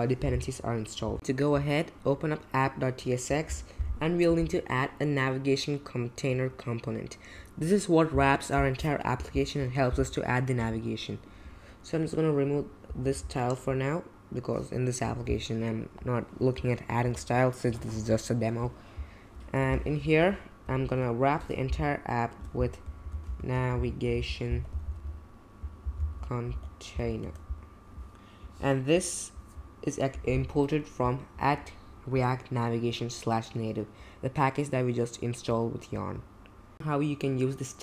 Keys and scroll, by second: 3.5 super+b, 10.6 BackSpace, 13.0 BackSpace, 17.7 BackSpace, 22.8-27.4 typing.